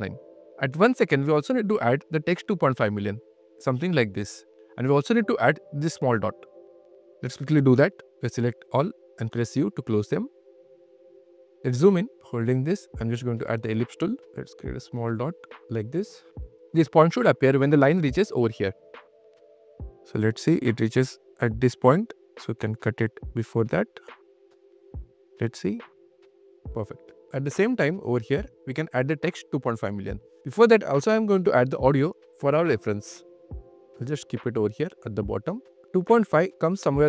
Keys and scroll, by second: 0.5 q, 2.6 super+q, 2.7 super+Tab, 3.2 Tab, 3.3 q, 8.5 super+q, 8.6 super+a, 8.9-10.3 typing, 18.8 q, 25.5 space, 26.0 q, 26.5 space, 27.0 q.